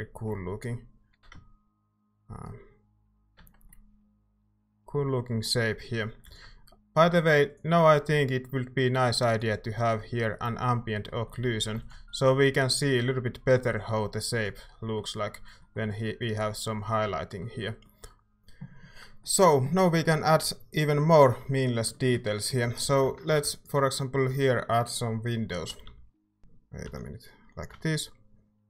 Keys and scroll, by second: 1.1 e, 3.3 Tab, 6.3 ctrl+s, 11.4 a, 11.7 ctrl+s, 21.4 Tab, 22.6 a, 22.8 a, 23.2 a, 25.7 i, 25.8 i, 26.4 i, 26.8 i.